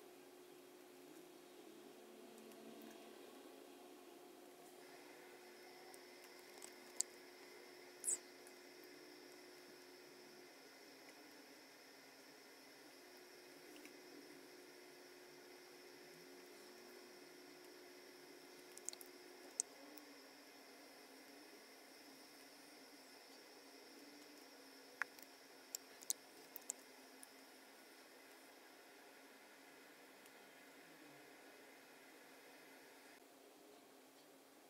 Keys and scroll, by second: 6.9 super+F9, 11.7 shift+super+[, 14.6 shift+super+[, 19.4 super+F9, 26.5 super+F9.